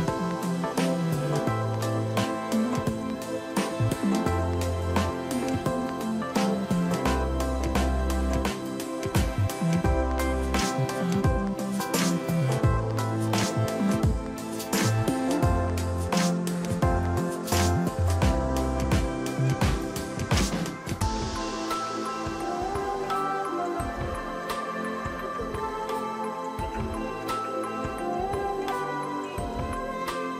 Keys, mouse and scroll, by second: 0.3 click, 0.8 click, 1.1 shift+click, 3.4 ctrl+a, 4.6 ctrl+d, 4.9 ctrl+t, 5.0 ctrl+t, 5.4 alt+click, 8.1 ctrl+j, 8.8 right click, 9.8 double click, 11.9 ctrl+t, 17.0 click, 19.4-20.0 scroll down 2, 20.7 shift+click, 22.5 ctrl+a, 23.7 ctrl+d, 24.1 ctrl+t, 24.2 ctrl+t, 25.4 alt+click, 27.2 ctrl+j, 27.8 right click, 29.0 double click.